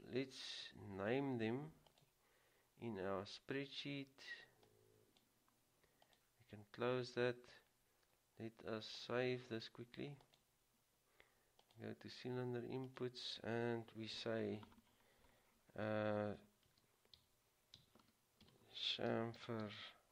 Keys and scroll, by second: 16.8-20.1 typing.